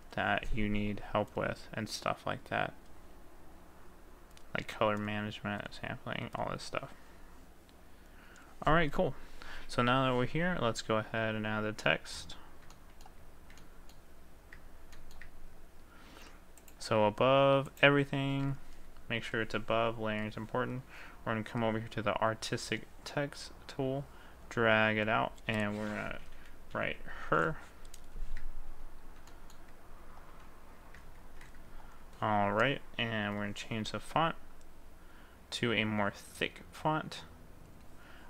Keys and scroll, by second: 27.3 r, 31.2 ctrl+a.